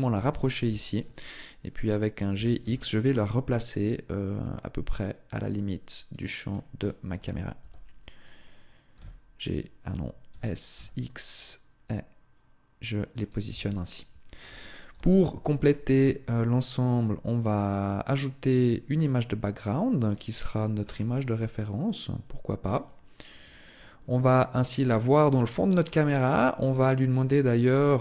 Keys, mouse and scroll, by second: 0.0 KP_0, 2.1 s, 5.2 click, 5.9 right click, 6.5 shift+right click, 7.4 g, 13.1 click, 13.3 Tab, 14.7 n, 15.7-16.1 scroll down 8, 16.5-17.7 scroll down 6, 17.7 click, 18.3 click, 18.7-19.7 scroll down 2, 19.7 click, 20.6-21.3 scroll down 2, 23.4 click, 24.7 scroll up 1, 26.4-26.8 scroll down 1, 26.8 scroll down 3, 27.9 click.